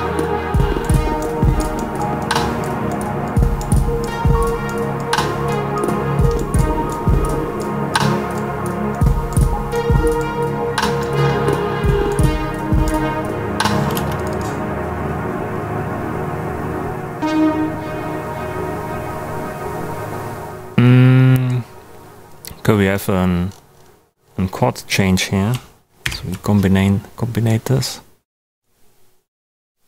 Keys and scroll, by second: 13.9 space, 26.0 super+j.